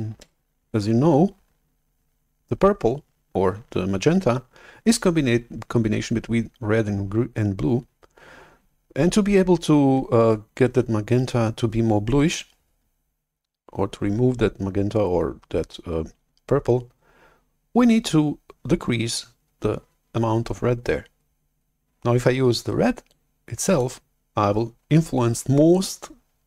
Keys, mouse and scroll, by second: 0.2 alt+Tab, 1.2 alt+Tab, 23.2 click.